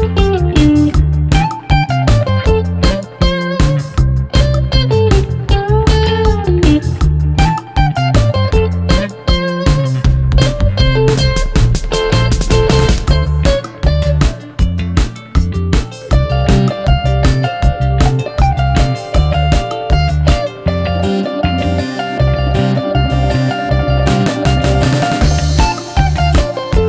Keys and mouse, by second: 0.6 shift+click, 1.2 i, 2.6 Tab, 3.4-4.1 middle drag, 4.3 shift+middle click, 4.7 middle drag, 5.2 click, 8.1 shift+click, 9.0 ctrl+j, 9.5-10.1 drag, 9.5-10.1 right drag, 10.4 shift+click, 10.4 shift+right click, 11.1 click, 11.6-12.7 drag, 12.9 click, 14.9 ctrl+z, 15.3 ctrl+z, 15.9 ctrl+z, 20.0 Tab, 20.2 click, 20.6 Tab, 20.9 click, 21.7 click, 22.6 g, 23.6 ctrl+a, 24.3 g, 24.7-25.1 middle drag, 25.5 shift+middle drag, 25.8-26.3 middle drag.